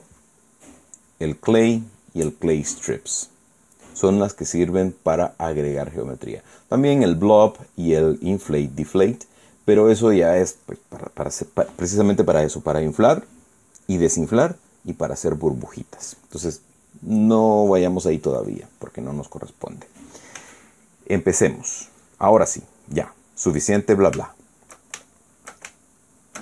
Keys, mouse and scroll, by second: 1.4 click, 19.1 click, 21.1 f, 22.4 click, 23.0 middle click, 24.9-25.5 shift+middle drag.